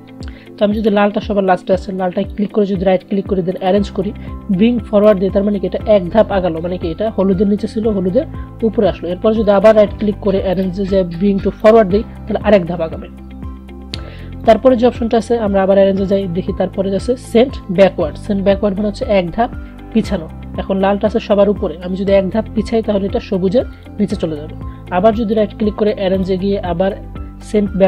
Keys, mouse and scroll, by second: 2.3 right click, 3.7 click, 9.6 right click, 10.6 click, 14.6 right click, 16.1 click, 23.9 click, 25.3 right click, 26.3 click.